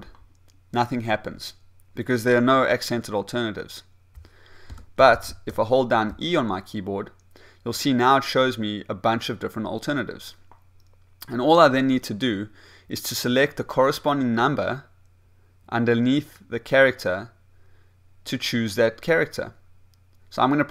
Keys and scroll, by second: 0.6 b, 6.1 e, 6.6 e.